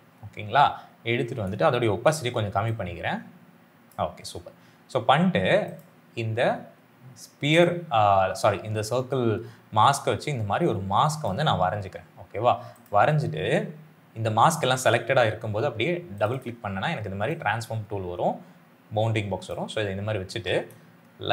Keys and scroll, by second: 1.8 t.